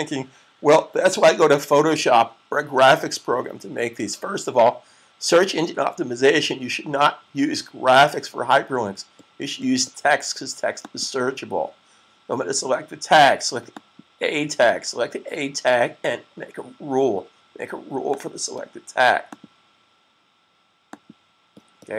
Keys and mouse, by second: 10.7 click, 13.5 click, 17.8 click.